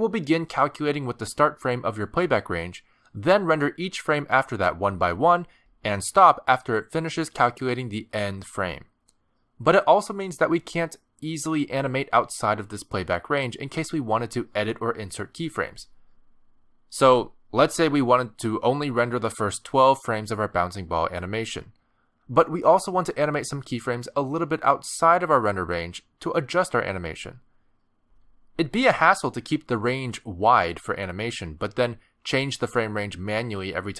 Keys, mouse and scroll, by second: 0.0 click, 0.6 r, 1.3 space, 1.7 space, 2.3 click, 14.6 middle click, 15.2 space, 18.5 space, 20.1 click, 22.7 space, 24.6 space, 25.0 click, 28.4 click, 28.7 space, 31.9 space, 32.0 click.